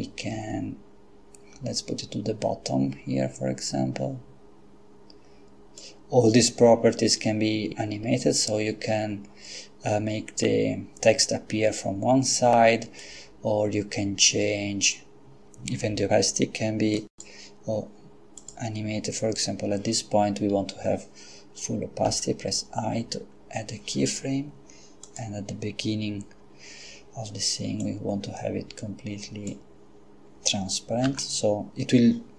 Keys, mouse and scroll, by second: 13.0-15.4 drag, 17.1 click, 18.4 click, 22.1 i, 25.1 click, 27.8-30.0 drag, 31.1 i.